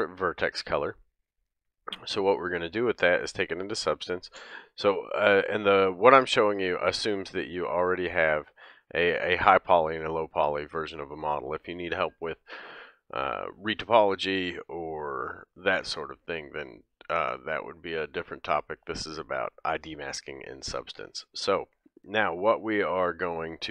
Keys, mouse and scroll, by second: 4.0 ctrl+Tab, 9.4-23.7 drag, 21.4 middle click, 23.1 middle click.